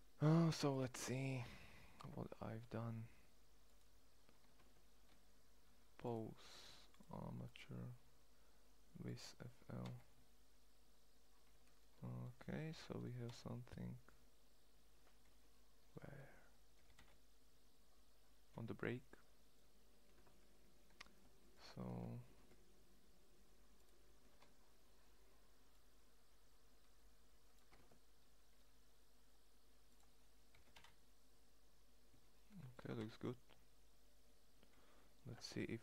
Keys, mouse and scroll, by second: 0.4 middle click, 4.2 ctrl+Tab, 9.3 g, 11.3 middle click, 12.2 click, 12.7 g, 16.5 g, 21.5 ctrl+Tab, 22.1 ctrl+Tab, 27.4 ctrl+Tab, 30.1 g, 32.4 g.